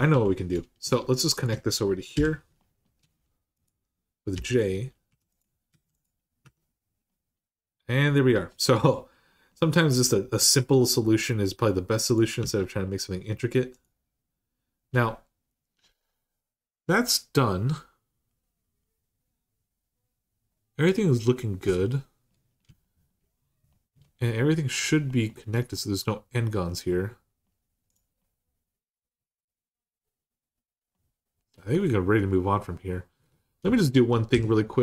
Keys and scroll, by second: 1.9 k, 4.1-6.2 typing, 12.2 Tab, 25.1 Tab, 26.4 Tab, 33.0 Tab, 34.0 Tab, 34.1 3.